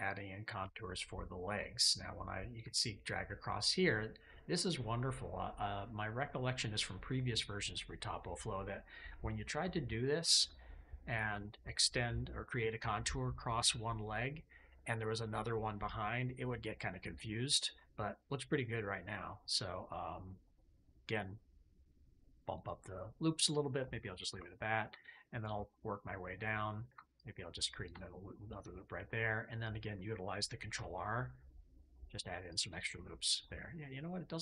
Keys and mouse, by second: 3.0-8.4 drag, 9.4 KP_5, 14.6 click, 17.7-19.8 drag, 21.7 click, 22.4 click, 24.2 KP_5, 28.3-29.4 drag, 30.6 ctrl+r, 32.4 click, 33.4-34.4 drag.